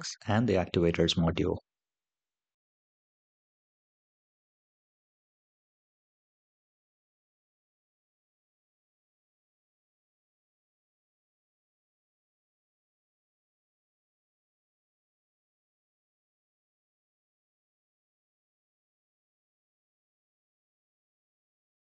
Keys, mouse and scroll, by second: 15.8-16.2 scroll up 2, 18.8-20.3 drag, 18.8 space.